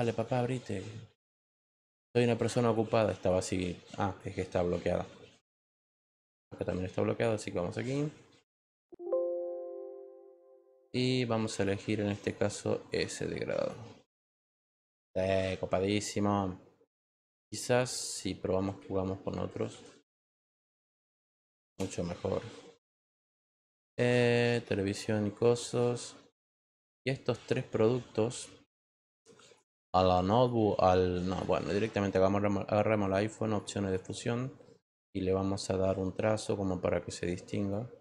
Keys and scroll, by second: 21.6 Return.